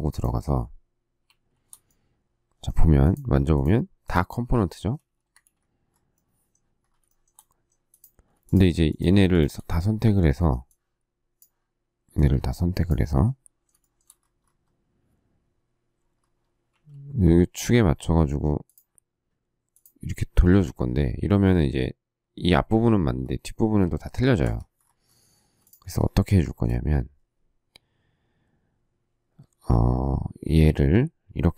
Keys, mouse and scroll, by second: 1.2 shift+q, 5.1 space, 5.3 Escape, 7.0 shift+middle click, 8.4 shift+click, 8.9 shift+click, 9.3 shift+click, 9.4 shift+double click, 13.8 shift+middle click, 16.7 q, 24.4 Escape, 25.3 space, 26.2 shift+middle click.